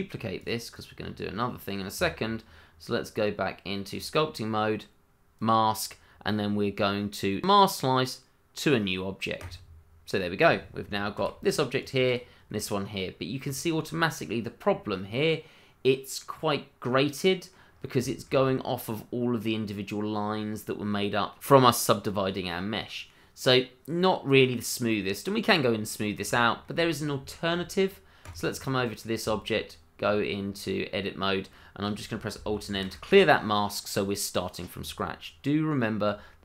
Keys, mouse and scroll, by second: 0.4 click, 0.8 double click, 1.0-1.4 scroll up 1, 1.4 middle click, 1.9 Tab, 5.3 click, 9.4 click, 11.1 g, 11.8 click, 12.1 double click, 12.5 middle click, 14.5 scroll up 1, 14.9 middle click, 17.7-18.0 scroll up 1, 18.0 shift+middle click, 18.3-19.5 shift+scroll up 1, 19.5 scroll up 1, 19.6 scroll down 1, 20.8 middle click, 21.4-21.8 scroll down 1, 22.6 scroll down 1, 22.9 middle click, 24.7-25.5 scroll up 1, 25.7-26.2 scroll down 1, 26.3 shift+middle click, 26.4 middle click, 26.5 shift+middle click, 27.3 middle click, 27.4 shift+middle click, 28.2 click, 28.6 middle click, 29.2 Tab, 30.4-31.5 scroll up 1, 32.7 alt+m, 33.8 middle click, 34.7 Tab.